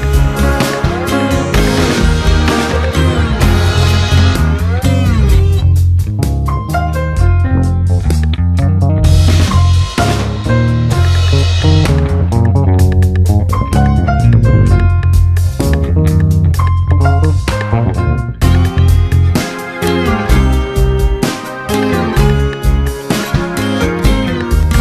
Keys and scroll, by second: 0.5 space, 5.6 ], 6.4 ctrl+g, 7.3 space, 8.5 Return, 12.4 ctrl+space, 12.9 w, 13.9 ctrl+alt+d, 14.3 Return, 16.6 ctrl+m, 18.8 Return, 19.4 ctrl+d, 19.5 ctrl+KP_Add, 20.0 space, 21.7 space, 24.0 ].